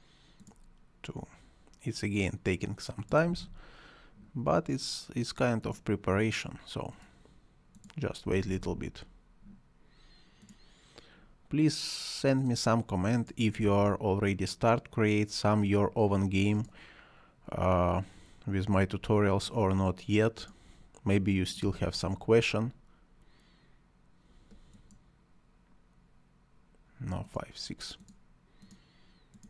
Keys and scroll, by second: 2.8-3.6 typing, 8.0-8.9 typing, 13.1-14.0 typing, 21.2-22.1 typing, 29.2-29.4 typing.